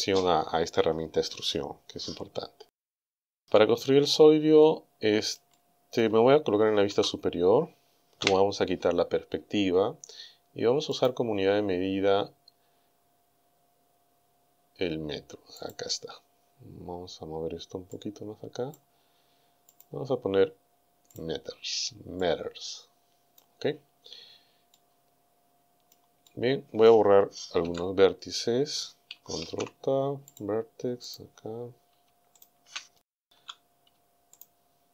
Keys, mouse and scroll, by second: 3.5 Tab, 4.6-6.2 middle drag, 6.9 KP_7, 8.2 KP_5, 11.0 click, 14.0-14.4 scroll up 1, 14.4 scroll down 1, 15.6 click, 18.0 click, 19.7 click, 21.1 click, 22.3-23.6 drag, 24.0-24.4 scroll up 1, 24.7-26.1 drag, 26.2 scroll up 1, 26.3 click, 27.6 Tab, 29.5 ctrl+Tab, 30.4 click, 31.1 right click, 32.4 shift+right click, 33.4 z, 34.4 shift+right click.